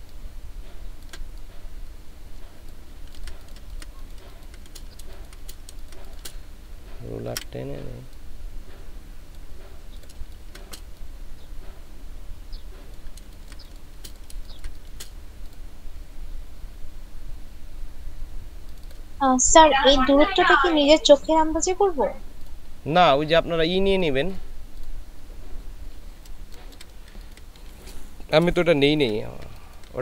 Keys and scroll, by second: 5.1 ctrl+space, 10.3 ctrl+space, 13.3 ctrl+space, 14.4 ctrl+space, 26.5 ctrl+space, 27.1 ctrl+space, 28.9 ctrl+space.